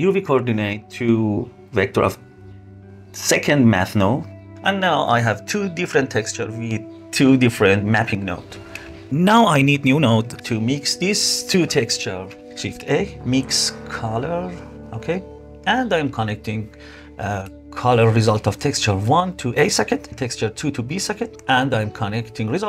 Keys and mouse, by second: 0.5-1.2 drag, 1.4 click, 2.0-2.4 drag, 3.5 click, 3.7-6.9 drag, 8.2 click, 12.0 shift+a, 13.3 BackSpace, 16.0-18.7 drag, 19.3-20.4 drag, 20.9 click, 21.2-22.3 drag.